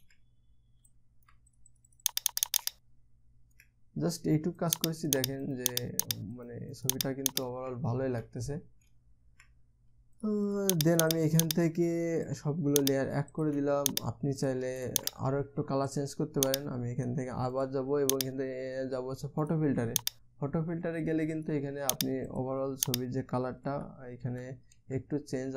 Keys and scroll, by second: 24.2 Down, 24.8 Down, 25.3 Up.